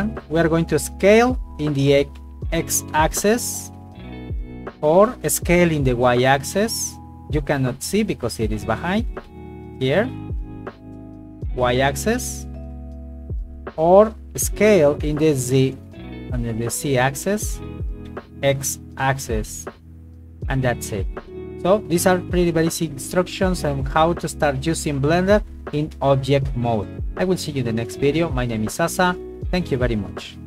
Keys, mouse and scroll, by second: 0.2 click, 1.1 s, 1.9 x, 4.9 click, 5.3 s, 5.7 y, 7.5 click, 8.0 middle click, 8.9 s, 9.3 y, 12.7 Escape, 13.4 KP_1, 14.4 s, 15.0 z, 17.4 click, 17.8 s, 18.1 x, 20.1 click, 20.8 Tab, 22.3 right click, 23.1 shift+middle click, 27.2 shift+middle click, 28.3 shift+middle click.